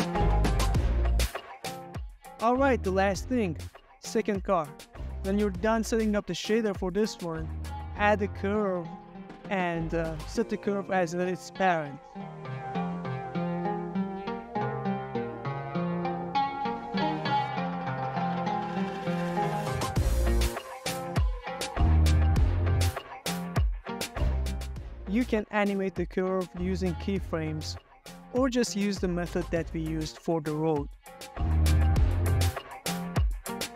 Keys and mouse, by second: 0.0 click, 1.7 KP_Decimal, 2.6-3.2 middle drag, 3.6 middle click, 4.1 ctrl+middle click, 4.4 middle click, 5.2-6.1 middle drag, 6.3 middle click, 6.7 ctrl+middle click, 7.0 middle click, 7.7 z, 9.3-9.7 middle drag, 9.9 shift+middle click, 11.5 click, 12.7 shift+a, 15.1 ctrl+middle click, 15.4 middle click, 15.7 z, 16.8 z, 18.1 shift+middle click, 18.6 ctrl+middle click, 18.9 ctrl+middle click, 19.2 z, 20.0 shift+middle click, 20.6 ctrl+middle click, 21.0 shift+middle click, 21.6 ctrl+middle click, 22.0 s, 22.9 click, 23.2 ctrl+middle click, 23.5 ctrl+middle click, 23.7 ctrl+middle click, 24.1 s, 29.0 click, 29.6 shift+middle click, 30.1 ctrl+middle click, 30.5 ctrl+shift+middle click, 30.8 ctrl+middle click, 31.5 s, 33.0 drag, 33.1 ctrl+middle drag, 33.5 shift+middle click.